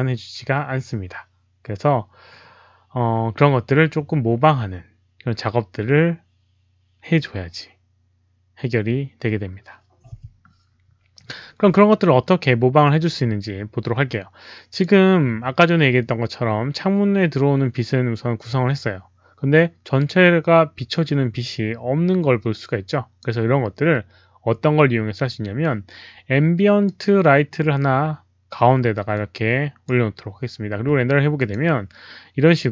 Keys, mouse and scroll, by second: 12.2-14.7 drag, 22.4 click, 26.8 click, 29.1 click, 31.3 click.